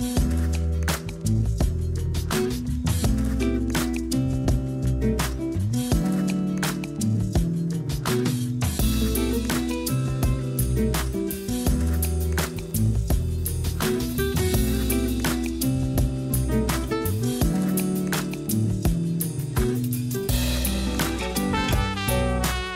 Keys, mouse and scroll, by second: 0.8-1.8 scroll down 9, 1.8 scroll up 3, 2.4 a, 2.6 a, 3.3-4.3 shift+middle drag, 4.3 Tab, 5.3-6.0 scroll up 2, 6.8 click, 9.4 a, 9.6 a, 9.9 Tab, 10.3 a, 10.5 a, 11.4 click, 13.6 scroll up 1, 17.8 click.